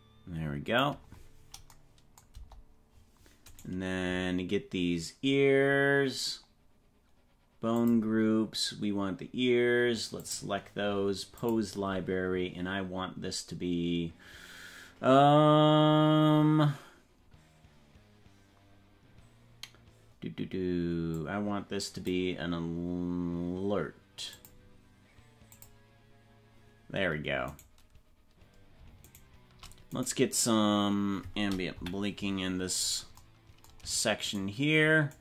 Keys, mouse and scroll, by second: 2.4 KP_0, 4.0 right click, 7.7 click, 10.2 click, 11.4 click, 21.1-22.2 drag, 24.4 click, 25.6 click, 28.1 right click, 31.7 KP_Decimal, 32.6-33.2 scroll down 10, 34.4 shift+right click.